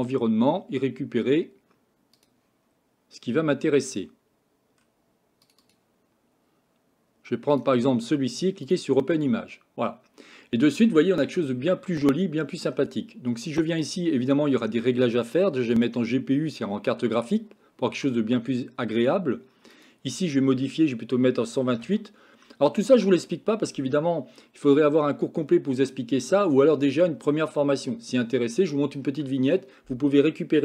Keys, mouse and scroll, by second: 2.3 click, 13.9 click, 15.3 click, 19.8-22.1 drag.